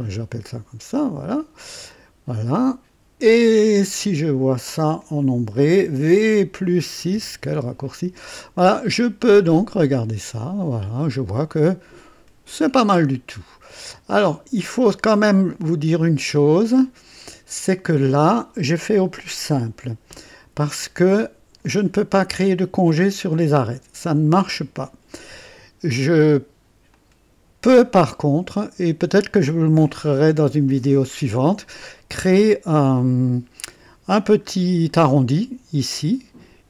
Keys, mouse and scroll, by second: 1.2 click, 1.8 click, 2.4-3.8 drag, 3.9-5.1 drag, 6.9 v, 7.0 KP_6, 8.7-13.8 drag, 13.8-14.5 right drag, 14.7 click, 15.5-17.3 drag, 17.5 scroll up 1, 20.4 &, 21.1 click, 21.8 scroll up 1, 22.4 right click, 26.8-31.5 drag, 34.4 scroll up 2, 34.8-35.4 right drag.